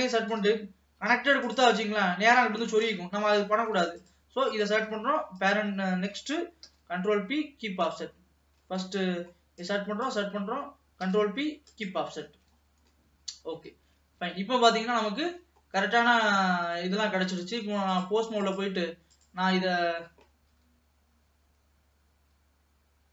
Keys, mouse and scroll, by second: 0.4 ctrl+p, 2.8 ctrl+z, 3.8 ctrl+s, 4.3 click, 4.6 click, 5.4 shift+click, 6.7 ctrl+p, 8.8-9.2 scroll down 2, 9.2 middle click, 9.6 click, 10.1 shift+click, 11.1 ctrl+p, 12.4 ctrl+s, 12.8 scroll down 2, 13.0-14.1 middle drag, 14.1 ctrl+s, 14.5 alt+a, 14.6-15.6 scroll up 2, 15.6 ctrl+s, 15.6-16.1 scroll down 2, 16.1-18.2 middle drag, 18.2-19.7 drag, 19.8 middle click, 20.6 g.